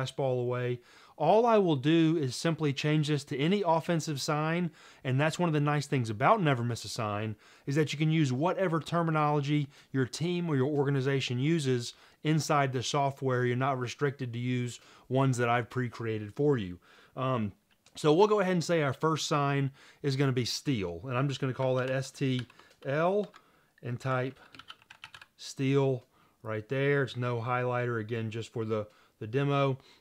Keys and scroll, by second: 21.7-25.7 typing, 27.3-28.0 typing.